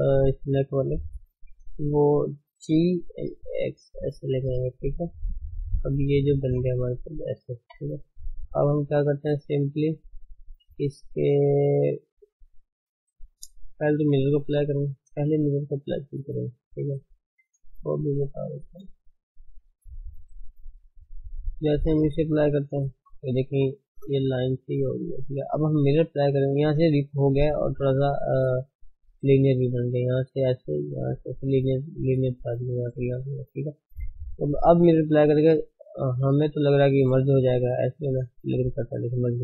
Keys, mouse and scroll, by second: 2.7 g, 7.6 Tab, 7.9-8.4 scroll down 3, 8.8-9.3 ctrl+middle drag, 9.3-15.3 middle drag, 15.6-17.3 middle drag, 15.8-16.2 scroll up 4, 17.3 shift+h, 17.6 middle click, 17.8 scroll down 1, 18.0-22.6 shift+middle drag, 22.6 click, 23.3 middle click, 24.1-24.6 scroll up 3, 24.6 Tab, 25.5 Tab, 38.6 click, 38.9 Tab, 39.3-39.4 middle drag.